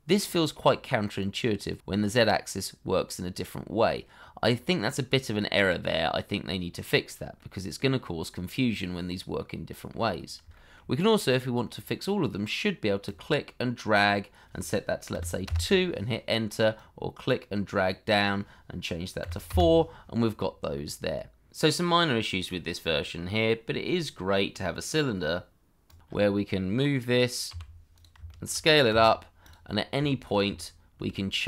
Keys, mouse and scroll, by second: 0.0 middle click, 6.9 scroll down 1, 7.3 middle click, 10.1-10.4 scroll up 1, 10.5 shift+middle click, 15.1 2, 15.4 Return, 19.2 4, 19.5 Return, 20.7 middle click, 21.5 End, 21.9 shift+a, 24.2 shift+middle click, 24.7-25.1 scroll up 1, 25.4-27.5 shift+scroll up 1, 27.5 g, 28.2 shift+middle click, 28.9 s, 29.6-29.9 scroll down 1, 30.0 shift+middle click.